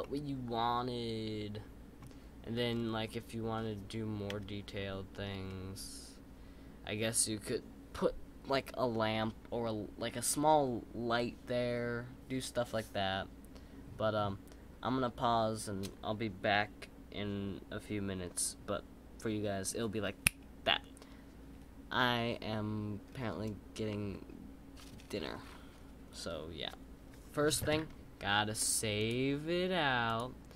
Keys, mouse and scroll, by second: 0.0-2.0 middle drag, 2.0-2.7 scroll up 4, 2.7-4.3 scroll down 5, 5.5-8.6 middle drag.